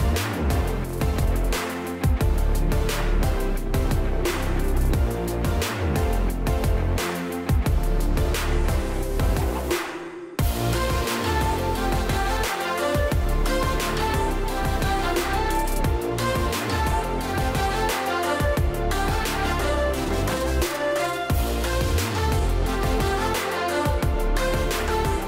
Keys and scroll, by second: 24.3 shift+Up, 24.6 shift+Up.